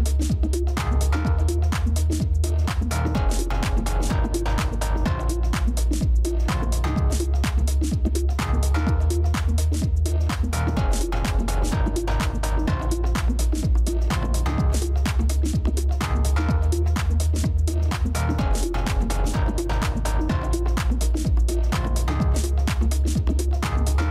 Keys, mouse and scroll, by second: 2.9 ctrl+y, 6.7 ctrl+y, 8.4 double click, 9.6 Right, 12.6 shift+;, 15.3 typing, 16.5 ctrl+-, 16.7 ctrl+-, 17.2 space, 21.4 double click, 22.5 space, 23.6 space.